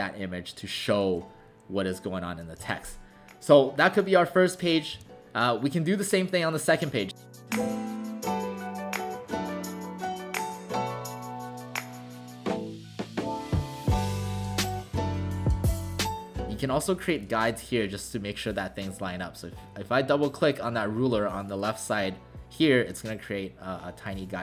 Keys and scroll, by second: 2.6 w, 5.0 w, 9.9-10.3 typing, 11.0 Delete.